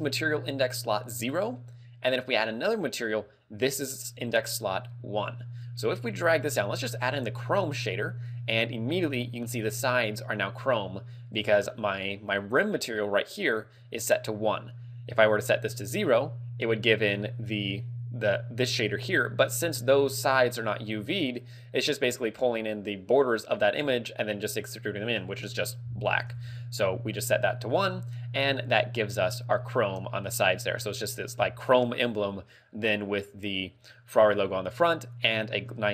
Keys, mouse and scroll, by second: 2.3 click, 2.6 click, 6.2 click, 11.4 click, 15.4 click, 27.7 click, 34.0 middle click.